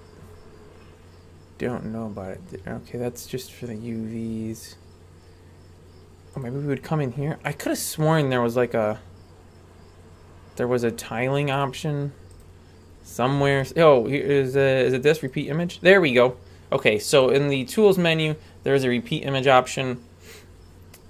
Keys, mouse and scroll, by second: 6.3-12.3 drag, 15.3 click, 17.2-18.3 drag, 20.5-21.0 scroll up 3.